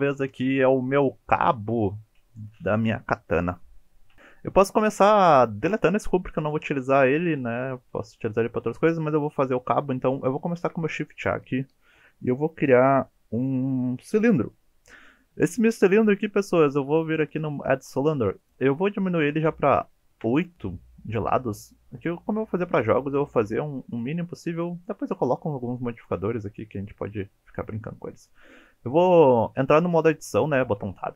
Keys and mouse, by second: 5.7 Delete, 10.6 shift+a, 18.4-21.0 drag, 21.9-22.4 middle drag, 23.2 KP_1, 24.0 Tab, 26.0 click, 30.4 Tab, 30.8 Tab.